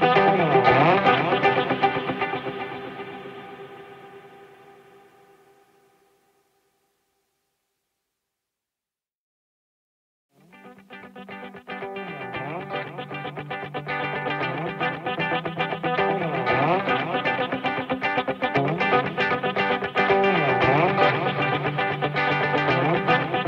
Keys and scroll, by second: 3.5 ctrl+z.